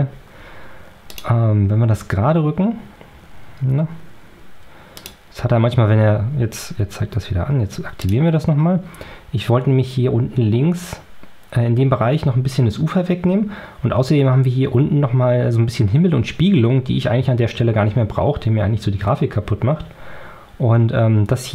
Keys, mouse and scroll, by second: 1.0 click, 4.8 click, 7.9 click.